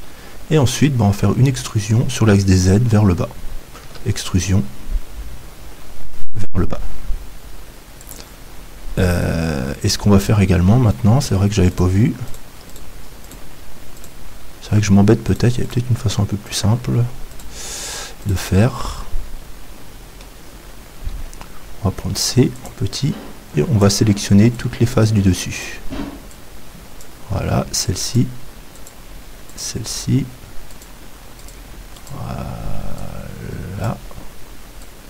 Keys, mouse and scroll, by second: 3.8 e, 8.2-10.2 drag, 10.2-20.1 right drag, 19.0-21.1 middle drag, 21.1 c.